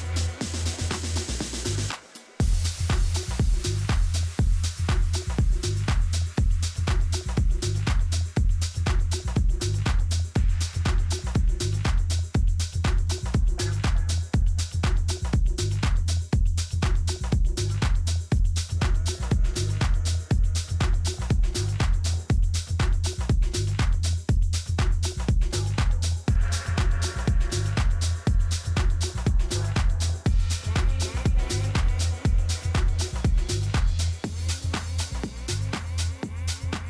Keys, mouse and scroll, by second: 1.9-3.9 right drag, 2.6-3.6 middle drag, 3.9 middle click, 6.2-8.1 drag, 12.5-14.4 right drag, 14.0-15.7 drag, 18.7-20.3 middle drag, 21.9 a, 22.4 a, 22.8 a, 23.3-27.3 right drag, 27.2 click, 28.0 middle click, 30.1-32.7 right drag, 32.9-34.8 drag.